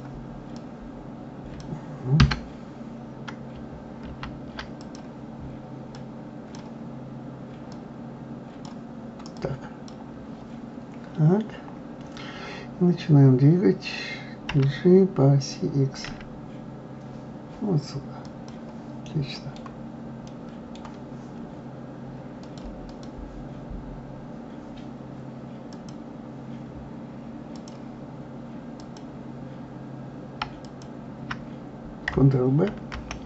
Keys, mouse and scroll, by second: 2.2 Escape, 4.1 ctrl+z, 4.8 click, 5.9 click, 7.7-9.4 drag, 19.3 middle click, 20.3-22.4 middle drag, 22.4 click, 22.9 click, 23.7-24.1 scroll up 3, 25.7 click, 27.5 click, 28.8 click, 30.6 alt+click, 32.9 ctrl+b.